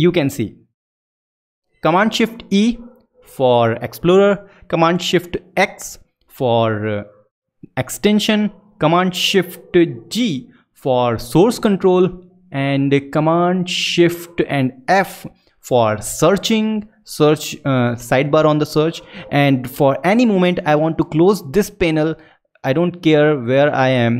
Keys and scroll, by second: 2.4 shift+super+e, 5.5 shift+super+x, 9.8 shift+super+g, 15.4 shift+super+f.